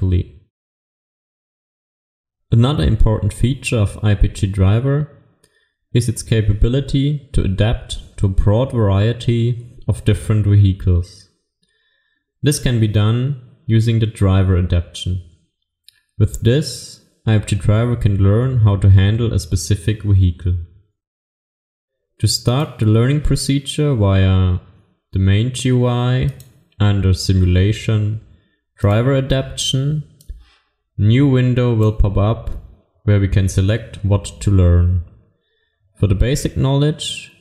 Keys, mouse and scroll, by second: 23.3 click.